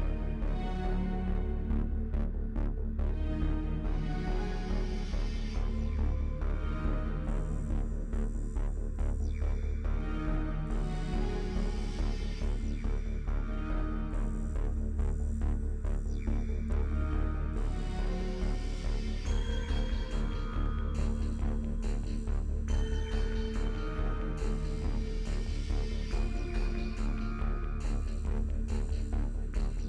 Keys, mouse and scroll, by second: 2.6 scroll up 2, 5.5-6.7 middle drag, 9.2-9.6 scroll up 2, 10.4-20.2 middle drag, 22.7-23.2 scroll up 2, 24.2-25.8 shift+middle drag, 25.8 scroll up 2, 26.4-29.8 shift+middle drag.